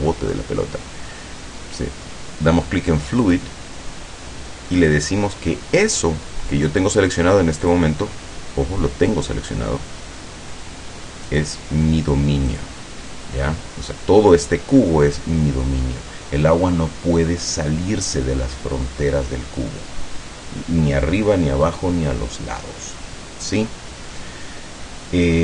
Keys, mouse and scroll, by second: 3.3 click, 4.9 click, 7.8 click, 8.2-8.5 scroll down 1, 9.5-10.0 scroll up 1, 11.4 click, 12.0 scroll up 2, 12.6 click.